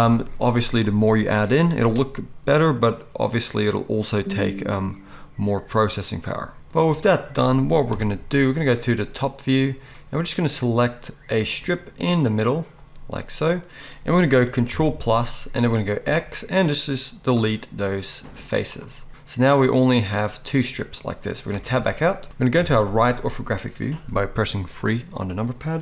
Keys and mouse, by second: 7.4 middle click, 7.9 KP_7, 14.7 ctrl+KP_Add, 14.7 ctrl+middle click, 16.0 x, 21.6 Tab, 22.6 KP_3.